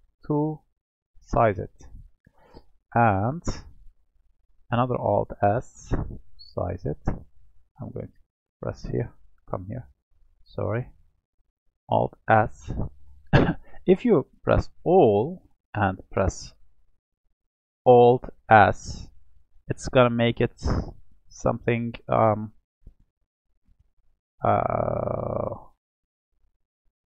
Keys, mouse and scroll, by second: 0.7-3.3 middle drag, 3.3 click, 4.8-7.2 alt+s, 8.2 click, 9.0-9.5 scroll down 4, 9.5 middle click, 10.4-12.1 scroll up 5, 12.1-13.3 alt+s, 14.7 a, 15.6 middle click, 16.3-18.5 scroll down 1, 18.5 alt+s.